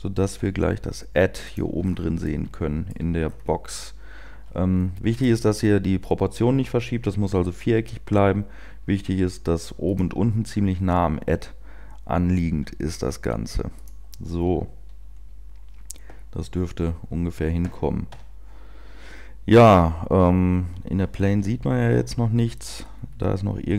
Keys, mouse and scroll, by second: 0.2 click, 0.2 g, 7.9 g, 13.6 g, 18.2 Tab.